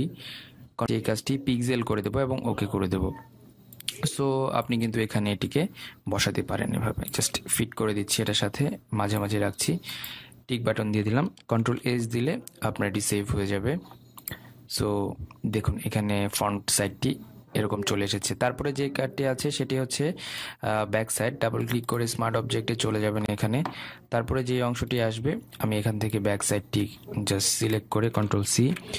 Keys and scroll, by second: 0.2 ctrl+v, 12.2 ctrl+s.